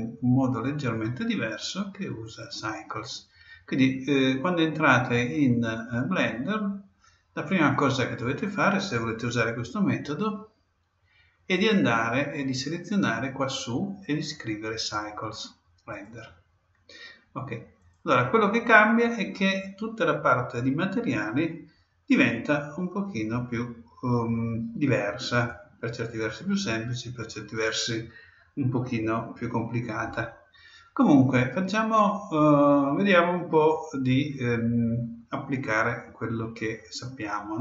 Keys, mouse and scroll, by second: 2.2-4.0 drag, 11.5-13.3 drag, 17.8-19.6 drag, 25.5-27.3 drag.